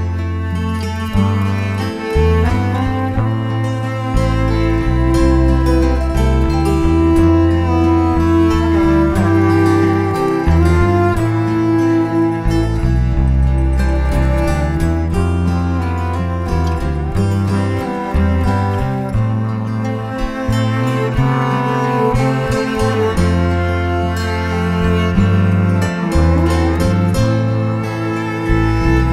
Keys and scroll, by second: 12.4 shift+c, 23.7 shift+Return, 25.5 shift+v, 26.7 shift+t, 27.8-29.1 typing.